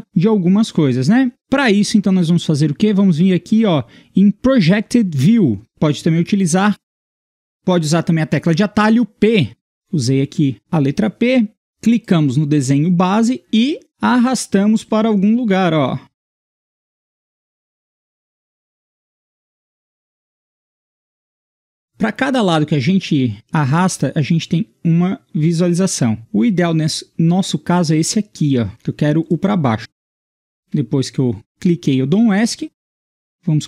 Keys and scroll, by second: 9.5 p, 30.6 Escape.